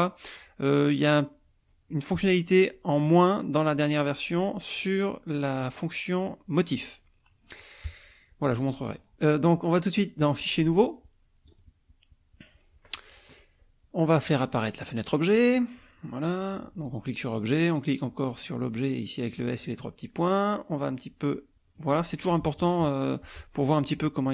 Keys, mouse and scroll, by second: 10.2 click, 11.5 click, 15.3 click, 19.5 click, 20.8-21.9 drag.